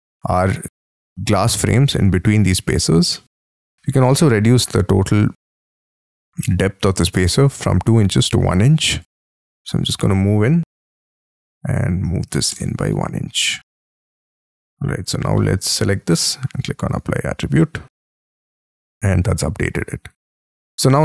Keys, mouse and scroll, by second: 1.1 middle click, 2.4 middle click, 3.5 t, 6.5 space, 6.6-7.6 scroll down 17, 7.6-8.8 scroll up 13, 8.8 double click, 9.0 double click, 9.4 middle click, 10.7 p, 11.8 1, 12.3 shift+', 12.5 Return, 12.9 space, 13.1 Escape, 13.4-13.7 scroll down 7, 13.7 middle click, 14.3 shift+middle click, 14.7 Escape, 15.4 middle click, 16.1-18.4 scroll down 1, 18.4 scroll up 3, 18.7 middle click.